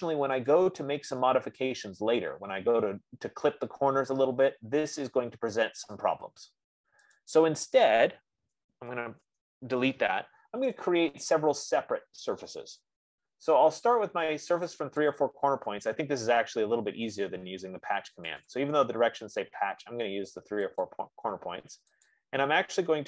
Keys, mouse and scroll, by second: 0.9 click, 1.8 middle click, 2.0 middle click, 7.8-12.7 drag, 8.7-10.0 typing, 12.7 right click, 15.4 click, 18.8 click, 21.6 click, 22.5 click.